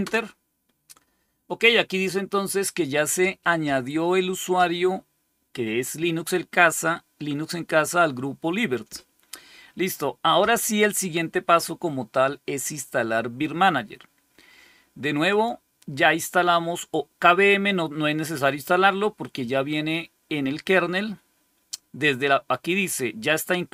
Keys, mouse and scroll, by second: 15.2 click.